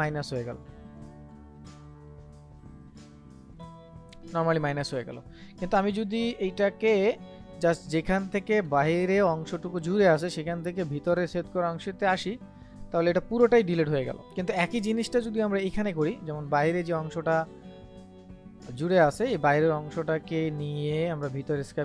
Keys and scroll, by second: 1.6 ctrl+z, 6.0 ctrl+z, 14.2 ctrl+z.